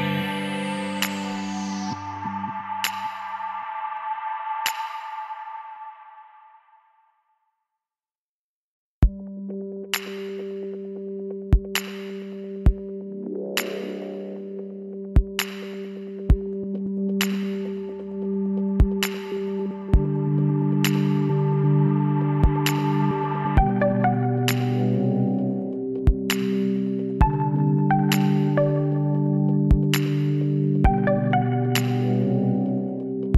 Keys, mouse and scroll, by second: 4.9 middle click, 4.9-5.5 scroll up 1, 6.0-9.5 middle drag, 9.5 s, 19.3-20.5 drag, 20.2 s, 27.5-29.5 middle drag, 29.5 Tab, 30.0 z.